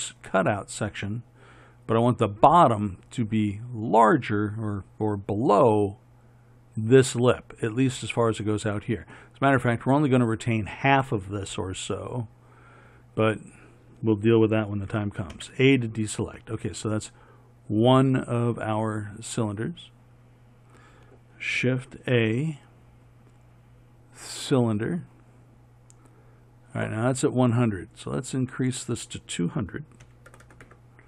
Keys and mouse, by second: 15.5 a, 22.1 shift+a, 30.6 KP_0.